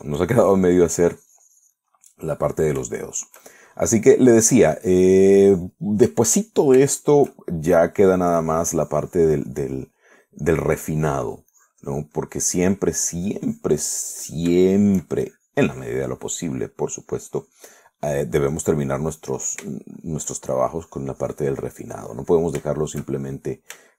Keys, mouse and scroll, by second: 3.2-5.4 middle drag, 5.8-7.1 drag, 7.1 middle click, 8.1-9.2 shift+middle drag, 9.6-11.4 drag, 11.7-13.4 drag, 13.4 middle click, 14.4-15.8 drag, 15.9 shift+middle click, 16.4-18.1 shift+drag, 18.2 click, 19.9-20.3 scroll up 2, 20.3 middle click, 21.0 shift+middle click, 21.9-23.9 shift+drag.